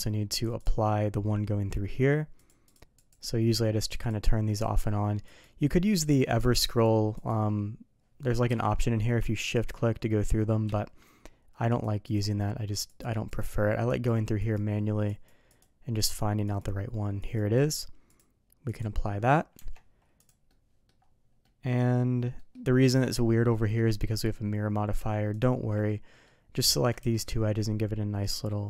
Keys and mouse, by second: 0.3 click, 0.5 click, 2.3 click, 2.6 click, 2.9 click, 3.8 click, 4.0 click, 5.2 click, 5.7 click, 6.6 click, 7.1 click, 8.4 q, 11.7 click, 12.0 click, 12.8 click, 13.3 click, 13.8 click, 14.4 click, 15.0 click, 15.5 click, 15.9 click, 16.4 click, 17.2 click, 17.5 click, 18.2 click, 19.5 Tab, 20.4-20.8 middle drag, 21.4 middle drag, 22.3 middle drag, 22.9 middle drag, 23.4 middle drag, 24.0 middle click, 25.3 shift+click, 25.8-26.2 middle drag, 26.5 middle click, 27.0 ctrl+b.